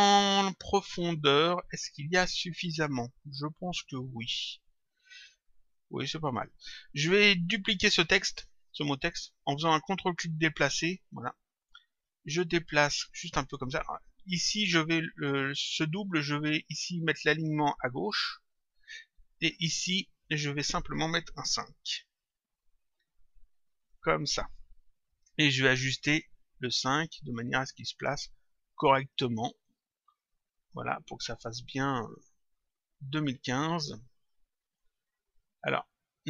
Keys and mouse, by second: 0.6 click, 1.8 click, 8.3 click, 12.0 click, 17.2 click, 19.6 click, 23.8 click, 25.5 click, 26.9 click, 29.0 click, 30.6 middle click, 31.8 middle click, 33.3 click, 35.3 click.